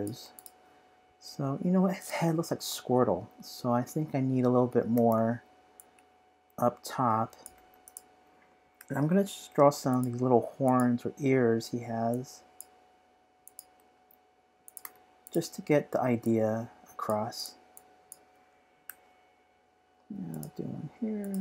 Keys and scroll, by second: 8.8 p, 13.4-14.2 typing.